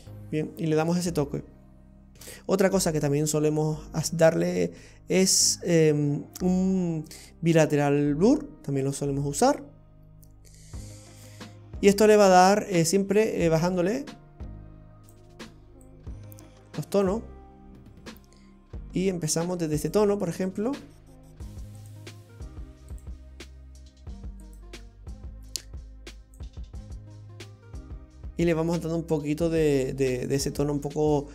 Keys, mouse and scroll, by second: 0.3-2.1 scroll down 13, 2.1 shift+a, 9.6-11.3 scroll up 9, 11.3 middle click, 12.5-13.7 scroll up 2, 13.9 click, 15.9 click, 19.8 click, 21.8 click, 23.0 click, 24.5 click, 25.6 click, 28.6-30.0 scroll down 15.